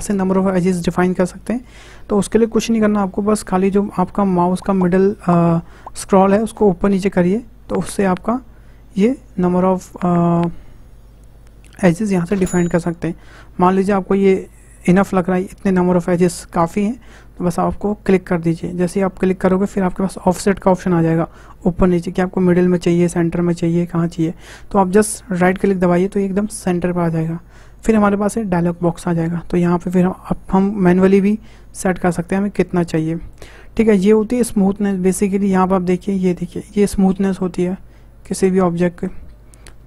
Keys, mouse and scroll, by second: 31.3-34.3 drag, 35.0-38.1 drag.